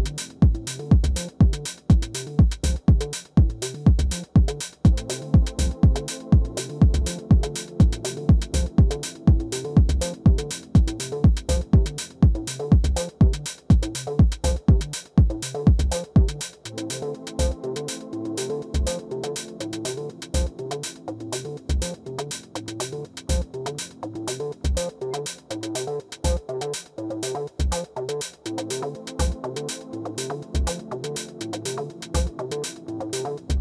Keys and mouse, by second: 2.0-8.8 drag, 8.8 middle click, 9.0 KP_3, 10.6-12.4 drag, 11.6 ctrl+z, 11.8 shift+f, 12.8-18.8 drag, 18.8-19.9 middle drag, 19.9-21.6 drag, 22.6 ctrl+i, 26.1-29.4 drag, 27.6-30.0 middle drag, 30.0-32.5 drag, 32.5 middle click.